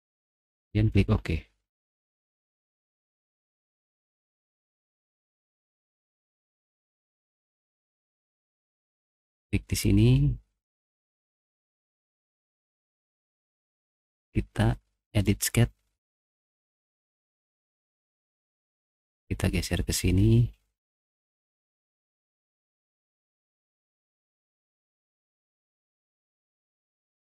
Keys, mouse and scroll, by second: 0.5 click, 1.2 typing, 4.0 middle click, 4.8 middle click, 4.8 scroll up 1, 5.3 middle click, 6.5-8.3 middle drag, 9.3 click, 11.1 click, 12.8 click, 14.3 click, 16.4 middle click, 16.8 scroll up 2, 17.2 middle click, 17.2 scroll down 2, 17.3 middle click, 17.3-17.7 scroll up 4, 17.5 middle click, 17.8 middle click, 18.7 click, 20.9 middle click, 21.8-22.3 scroll down 4, 21.9 middle click, 22.3 middle click, 22.6 middle click, 22.9 middle click, 23.1 middle click, 23.2 click, 24.4 click, 25.0 click, 27.0 click.